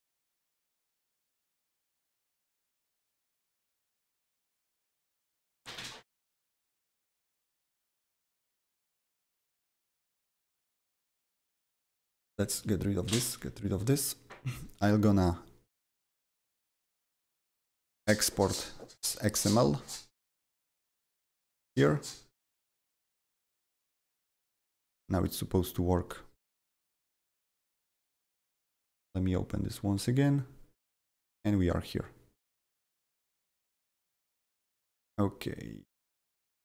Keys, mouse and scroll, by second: 8.2-9.4 drag, 9.4 click, 11.5 click, 12.1 click, 12.6 Delete, 13.1 click, 13.4 Delete, 14.6-19.3 right drag, 16.7 click, 18.3 click, 19.2 click, 19.3 click, 20.1 click, 21.1 click, 21.5 click, 27.1 click, 29.6-36.3 drag, 36.3 click.